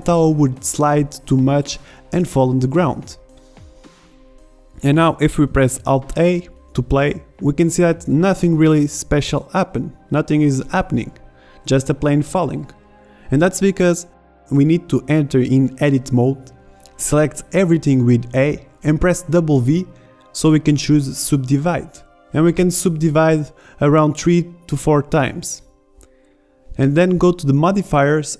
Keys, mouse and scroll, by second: 1.1-2.9 middle drag, 2.9 click, 3.2 click, 3.4 click, 5.3 alt+a, 7.3 alt+a, 8.9 shift+Left, 11.8 Tab, 19.0 w, 23.7 w, 24.3 w, 25.2 w, 26.4 Tab.